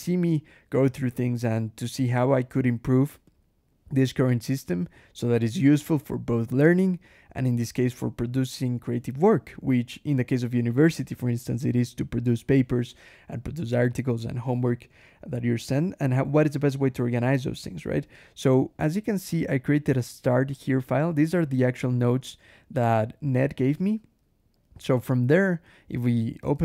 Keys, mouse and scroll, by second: 19.2 click, 20.4 click, 21.2-22.2 typing, 24.6 k, 25.6 l, 26.2 alt+Return, 26.5 alt+Escape.